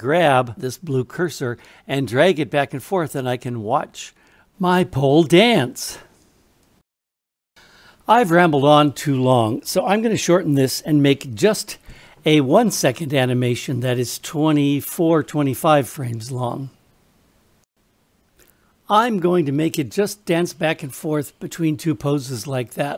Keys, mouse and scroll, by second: 17.6-22.9 drag.